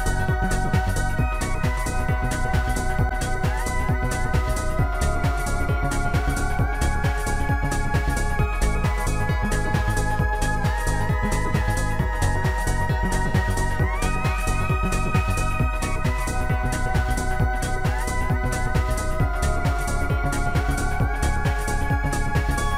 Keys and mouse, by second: 3.9 ctrl+End, 6.1 ctrl+Page_Up, 6.1 ctrl+End, 6.1 click, 8.0 click, 9.3 click, 12.9 click, 14.6 click, 19.5 click, 22.3 click.